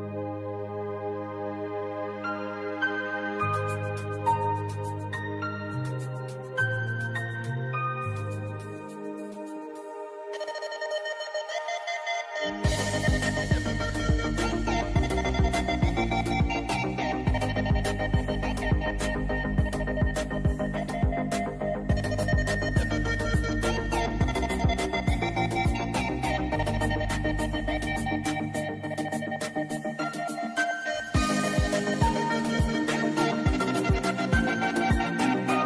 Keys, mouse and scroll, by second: 0.2 alt+scroll up 1, 0.4 space, 0.4 click, 0.7 space, 0.8 space, 1.5-3.6 drag, 3.8 space, 4.0 click, 4.1 space, 5.1-8.9 drag, 8.9-12.4 shift+drag, 12.8 space, 12.9 click, 13.1 space, 14.1-22.7 drag, 24.3-26.3 drag, 28.1 space, 28.2 click, 28.4 space, 29.7 click, 32.3 click, 34.7 click.